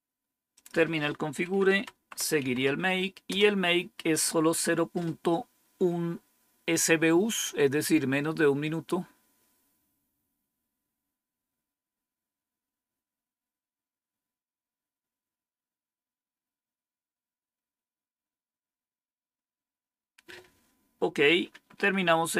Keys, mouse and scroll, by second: 0.5 click, 1.4-2.8 typing, 3.2 Return, 21.7 Up.